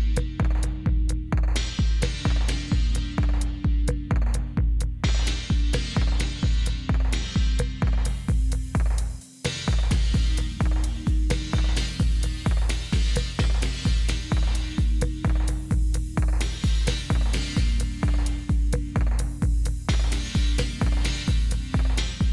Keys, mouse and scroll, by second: 0.5 Up, 0.8 Up, 4.6-5.9 drag, 9.7 click, 11.1-12.8 drag, 13.6-14.9 drag, 15.6-16.8 typing, 19.0 click, 20.2 click, 21.5 click, 21.5 typing.